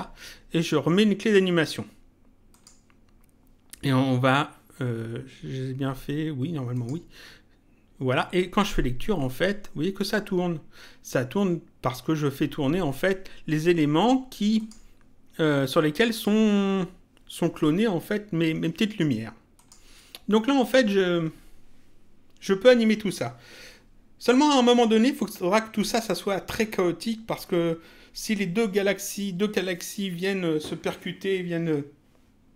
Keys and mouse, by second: 1.2 click, 2.5 click, 6.7 click, 14.6 click, 16.1 click, 19.6 click.